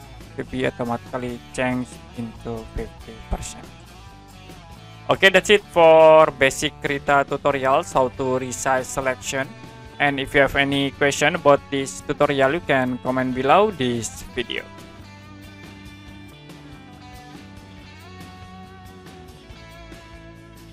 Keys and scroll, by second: 2.0 5, 2.4 0, 10.4 Print.